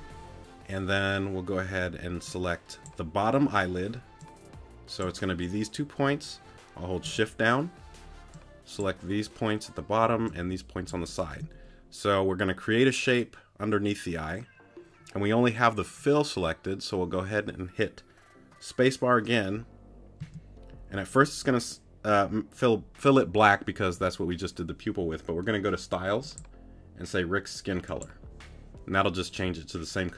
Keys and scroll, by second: 20.2 space.